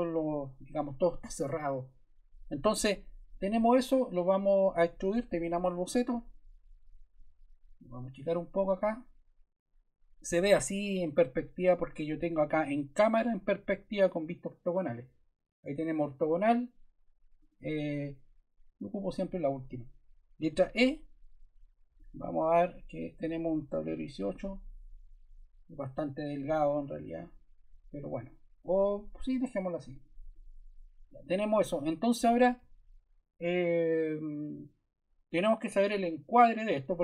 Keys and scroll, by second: 20.4 e, 23.6 1, 23.8 8.